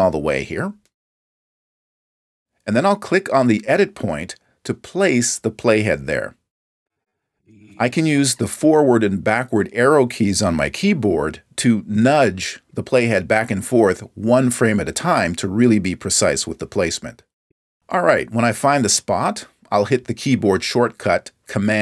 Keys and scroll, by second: 1.0 super+=, 12.2 Left, 13.5 Right, 16.0 Left, 16.7 Left, 17.9 Right, 19.0 Left.